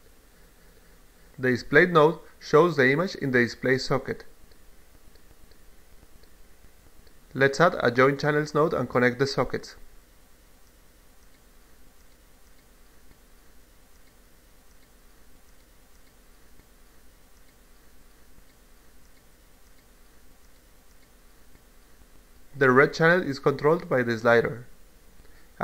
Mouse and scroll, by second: 0.8 click, 2.0 click, 3.2 click, 3.8 click, 4.8 click, 8.7 click, 9.7-12.0 drag, 13.8-15.2 drag, 16.4-17.7 drag, 18.1 click, 20.1 click, 20.3 click, 22.2-24.8 drag.